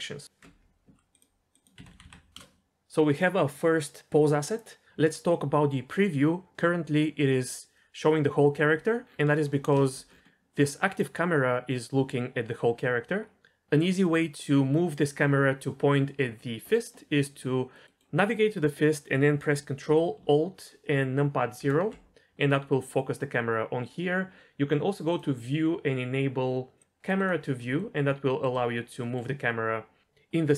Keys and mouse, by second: 1.1-2.4 drag, 1.9 BackSpace, 2.0 BackSpace, 9.5 middle click, 9.8 shift+middle drag, 17.0-17.4 middle drag, 17.7-18.2 middle drag, 21.6 ctrl+alt+KP_0, 26.8 click, 27.1 click.